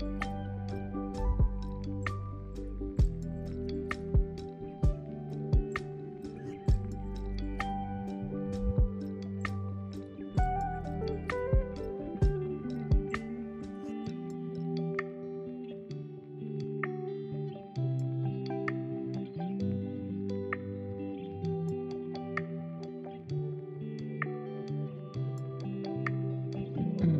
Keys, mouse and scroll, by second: 0.2 click, 1.4 click, 1.9 click, 2.4 click, 3.5 click, 5.3-7.0 scroll up 2, 7.0 s, 11.9-13.1 s, 13.4 g, 15.6 z, 16.1 s, 17.4 s, 17.4 s, 17.7 g, 19.0 scroll down 2, 19.2-20.0 middle drag, 20.0-20.3 scroll up 3, 20.3 Tab, 21.2-22.3 middle drag, 22.3 alt+click, 22.8-24.2 middle drag, 24.2 f, 24.9-27.1 drag, 24.9 middle click.